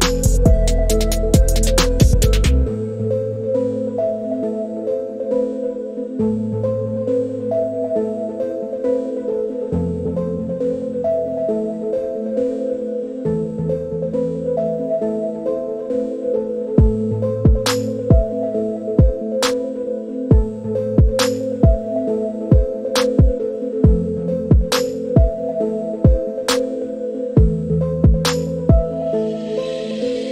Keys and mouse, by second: 2.2 click, 6.2 click, 12.4 click, 16.5 click, 17.8 click, 20.9 click, 25.6-26.8 drag, 29.2 click.